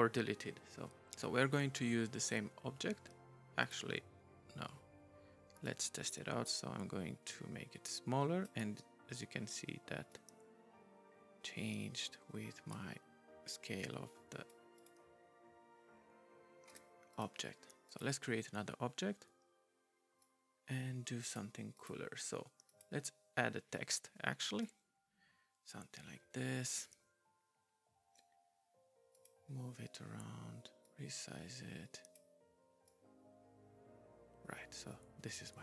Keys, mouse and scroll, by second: 3.6 right click, 5.6 right click, 10.1 right click, 13.8 right click, 14.8 right click, 16.7 right click, 17.1 right click, 17.9 right click, 20.2 right click, 21.7 right click, 22.7 right click, 24.6 right click, 24.8 c, 25.3 m, 29.1 right click, 30.8 right click, 32.9 right click.